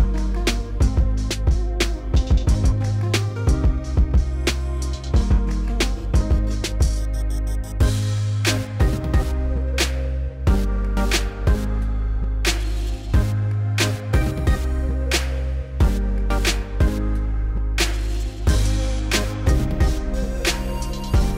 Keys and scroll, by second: 12.0 s.